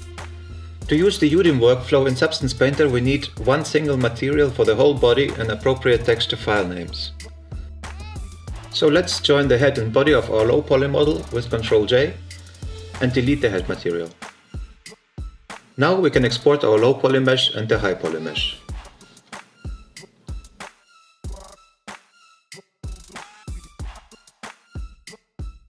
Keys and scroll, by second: 10.8 ctrl+j, 22.5 BackSpace, 22.9 shift+h, 23.0 i, 23.1 g.